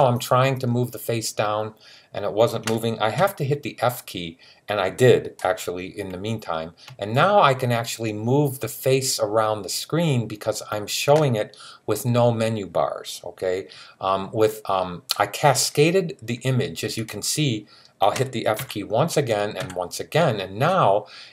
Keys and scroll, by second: 3.0 typing, 18.4 f, 19.4 typing.